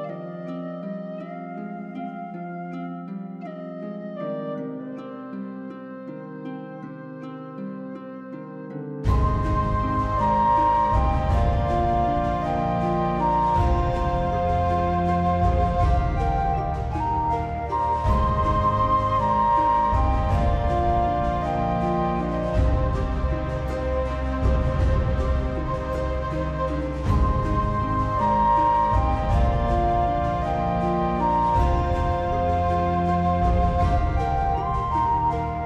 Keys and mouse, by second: 0.3 click, 0.4 alt+middle click, 0.7 click, 1.1 g, 1.3 click, 1.4 s, 1.6 click, 1.8 ctrl+r, 2.2 click, 2.4 s, 3.6 click, 4.4 r, 4.6 right click, 5.0 r, 5.3 click, 5.8 s, 6.1 middle click, 6.6 g, 6.9 click, 7.4 shift+middle click, 7.6-9.8 typing, 8.2 click, 8.7 click, 9.1 click, 9.3 click, 9.7 click, 10.0 click, 10.3 middle click, 10.7 middle click, 10.9 alt+middle click, 11.1 middle click, 11.3 shift+middle click, 12.1 alt+click, 12.4 shift+middle click, 12.9 g, 13.1 click, 13.5 click, 13.6 g, 13.6 middle click, 14.0 click, 14.7 middle click, 15.1 click, 15.4 click, 15.8 shift+click, 16.0 click, 16.3 click, 16.3 middle click, 16.8 2, 17.1 middle click, 17.5 click, 17.6 middle click, 17.9 shift+middle click, 18.2 middle click, 18.8 alt+click, 19.3 ctrl+f, 21.7 click, 22.4 click, 22.9 middle click, 23.3 alt+middle click, 23.5 alt+middle click, 23.7 shift+middle click, 24.0 alt+z, 24.1 middle click, 24.5 alt+z, 24.6 click, 25.0 alt+middle click, 25.1 alt+middle click, 25.3 g, 25.9 click, 26.4 click, 26.7 click, 26.9 alt+click, 27.1 shift+click, 27.4 right click, 27.9 shift+click, 28.2 r, 28.5 click, 28.6 g, 28.9 click, 29.1 alt+middle click, 29.3 alt+z, 29.7 alt+z, 30.0 click, 30.1 g, 30.2 middle click, 30.4 right click, 30.6 alt+middle click, 31.8 g, 31.9 click, 32.1 ctrl+r, 32.4 right click, 32.7 click, 32.8 g, 33.3 click, 33.5 click, 33.7 click, 33.9 g, 34.3 click, 34.7 click, 34.8 g, 35.2 click, 35.4 middle click.